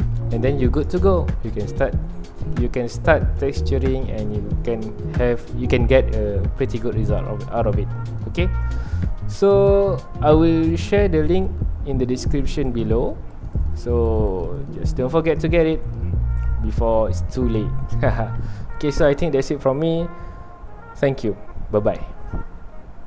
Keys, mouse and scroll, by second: 0.3 ctrl+s, 0.9 ctrl+alt+click, 1.7 middle click, 2.2 ctrl+s, 2.3 scroll down 1, 2.4 middle click, 2.9-3.3 scroll up 2, 3.3-4.2 scroll down 2, 4.2-5.9 middle drag, 5.9-6.3 scroll up 1, 8.3 middle click, 8.9 ctrl+s, 9.5-11.5 shift+middle drag, 11.5-13.9 ctrl+alt+drag, 13.9 x, 14.1-16.0 drag, 16.0-17.3 middle drag, 17.3 scroll up 1, 18.1 scroll down 1, 18.4 ctrl+s.